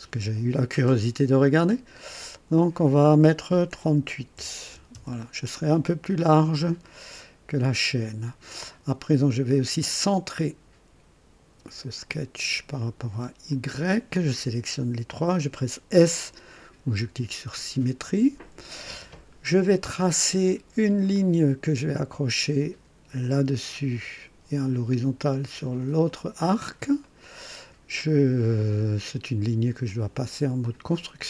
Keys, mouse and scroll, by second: 1.5 click, 4.3 KP_3, 4.6 KP_8, 4.9 KP_Enter, 7.9 scroll up 1, 10.3 click, 12.0 click, 13.5 click, 17.4 s, 21.1 click, 23.2 click, 26.0 click, 27.0 right click, 28.5 click, 30.6 click.